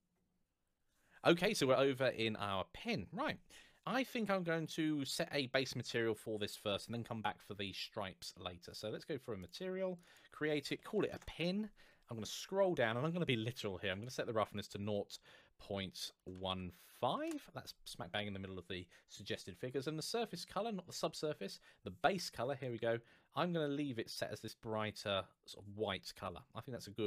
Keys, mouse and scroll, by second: 5.5 scroll down 1, 9.2 click, 10.5 shift+p, 10.7 i, 10.8 n, 10.9 Return, 11.8 scroll down 1, 13.7 click, 15.9 KP_0, 16.3 KP_1, 16.8 KP_5, 17.0 Return, 18.9 scroll up 1, 21.8 click.